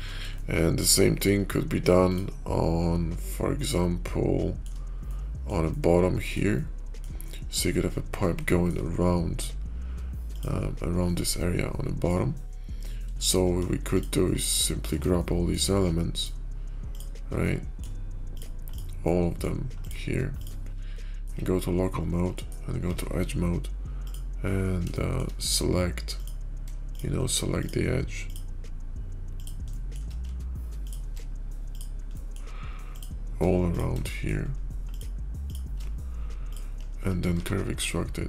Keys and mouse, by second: 0.0-1.1 shift+middle drag, 1.9 click, 3.5-4.5 middle drag, 5.0-5.4 shift+middle drag, 5.5-6.3 middle drag, 6.4 shift+middle click, 7.1 shift+middle click, 8.3 shift+middle click, 11.2-12.0 shift+middle drag, 12.6 middle click, 13.0 shift+middle drag, 14.1 shift+middle click, 15.0 shift+middle click, 15.9 shift+click, 17.3-17.7 middle drag, 19.0-19.3 shift+drag, 20.2 shift+click, 20.8 middle drag, 21.7 /, 22.2 middle drag, 22.8 Tab, 24.7 shift+middle click, 27.4 shift+click, 29.2 shift+click, 29.6 shift+click, 30.7 ctrl+click, 32.0 shift+click, 32.7 shift+click, 34.0 shift+click, 37.2 q.